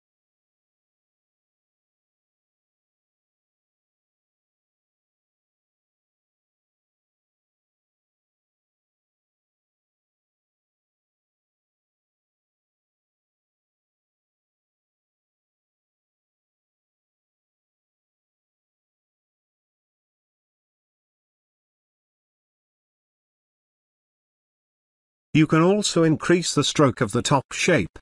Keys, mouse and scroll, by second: 3.8 space, 4.4 ctrl+click, 9.8-11.0 scroll down 2, 11.0 click, 11.4-11.9 scroll up 2, 13.9-14.3 scroll up 1, 14.3-14.7 scroll down 1, 14.7-15.1 scroll up 1, 15.1-15.5 scroll down 1, 15.5-17.2 scroll up 1, 19.0-19.4 scroll up 1, 19.4-19.9 scroll down 1, 19.9-20.2 scroll up 1, 20.2-20.6 scroll down 1, 20.6-20.9 scroll up 1, 20.9-21.3 scroll down 1, 21.3 scroll up 1, 24.2 click, 26.7 click.